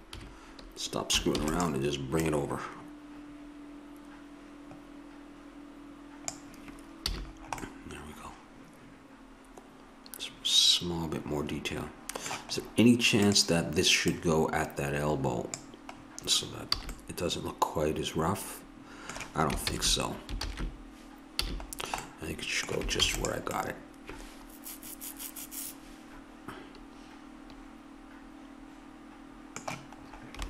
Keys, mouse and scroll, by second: 0.1 KP_3, 1.4 shift+d, 2.3-4.1 drag, 7.1 a, 7.3-9.4 middle drag, 13.2-16.0 drag, 16.8 a, 19.7 ctrl+z, 20.4 ctrl+z, 21.4 a, 23.0 ctrl+s.